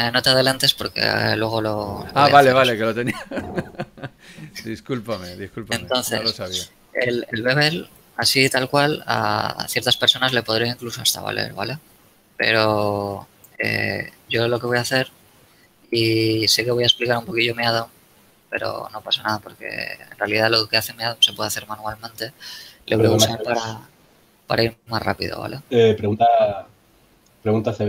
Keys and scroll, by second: 13.2 shift+Tab, 15.9 Tab, 16.2 a.